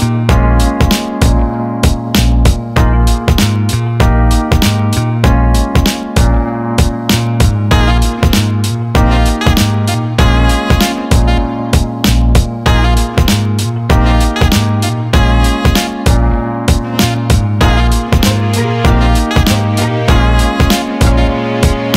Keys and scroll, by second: 16.8 ctrl+z.